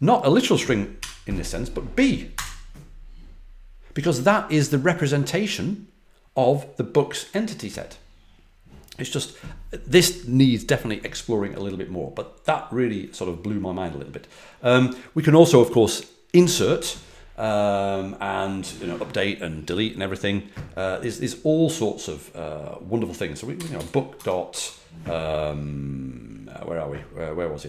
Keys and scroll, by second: 0.9 BackSpace, 0.9 b, 2.3 Return, 23.2-24.2 typing, 24.4 Tab.